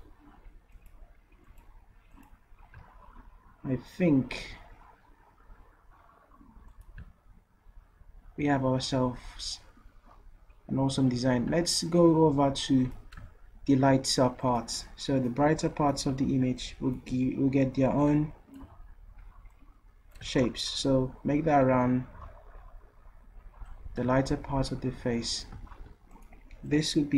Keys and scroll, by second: 16.3 ctrl+z, 18.6 d.